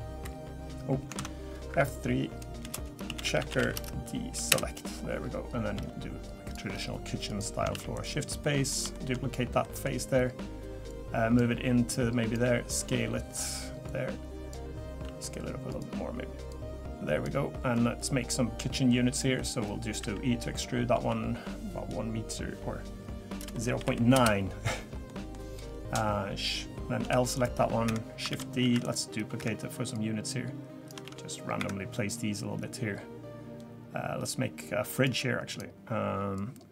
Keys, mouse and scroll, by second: 1.1 ctrl+z, 1.7 F3, 5.7 g, 6.7-7.3 scroll up 3, 7.3 click, 7.8 shift+d, 8.4 middle click, 8.9 shift+middle click, 9.6 middle click, 10.9 click, 11.9 click, 12.4 s, 13.9 click, 15.0 s, 16.5 click, 17.7 click, 19.4 middle click, 19.6 scroll down 1, 20.0 e, 25.1 middle click, 25.7-27.0 scroll down 2, 27.0 l, 27.3 right click, 28.3 shift+d, 28.8 right click, 29.9 click, 31.0 shift+d, 32.1 click, 35.5 click, 36.3 click.